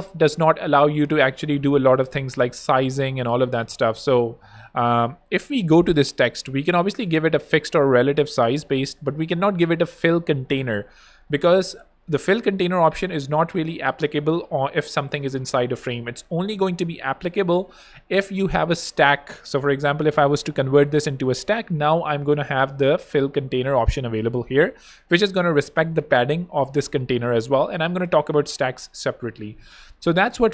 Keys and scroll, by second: 27.9 BackSpace.